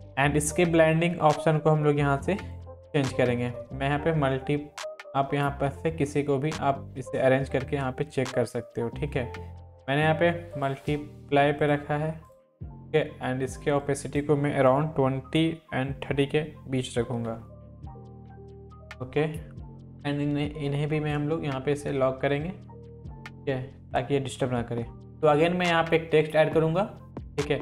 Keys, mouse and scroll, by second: 2.3 click, 2.4 click, 10.5 click, 19.8-21.3 drag, 27.0 click.